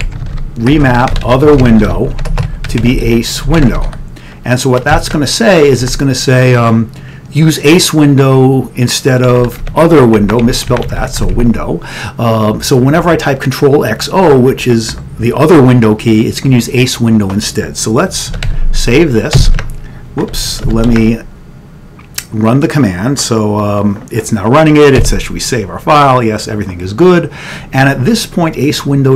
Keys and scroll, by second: 0.0-6.4 typing, 8.4 typing, 9.7 End, 10.3 Up, 10.5 End, 10.8 Left, 10.9 Left, 11.1 Left, 11.3 Left, 11.4 d, 18.4 ctrl+x, 18.7 ctrl+s, 25.1 y.